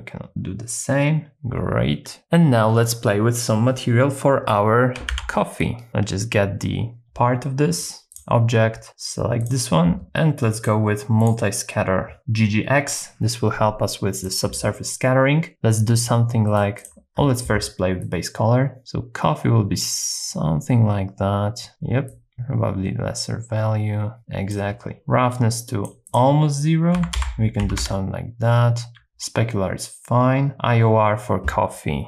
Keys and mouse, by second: 5.1 ctrl+b, 7.8 click, 9.5 click, 10.5 click, 14.2-16.5 drag, 16.8 click, 25.0 click, 26.1-27.8 drag.